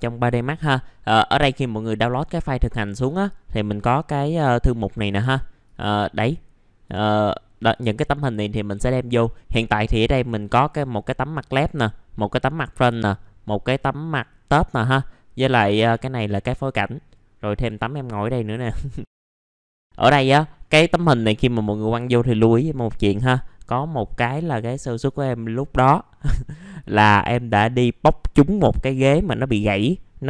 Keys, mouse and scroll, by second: 20.6-26.3 scroll up 1, 26.3 scroll down 1, 26.7 click.